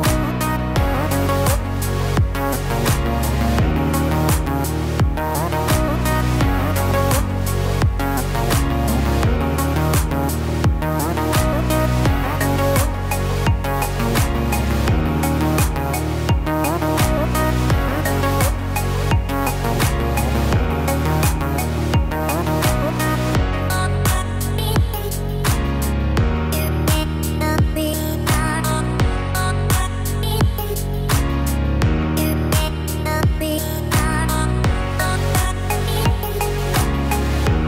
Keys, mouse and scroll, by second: 25.6 click, 25.6 KP_1, 26.3 scroll down 3, 26.9-27.6 scroll down 4, 27.4 middle click, 28.4 shift+middle click, 29.0-29.9 scroll up 3, 29.9 middle click, 29.9 scroll up 1, 30.8 click, 32.1 click, 34.6 f, 36.7 click.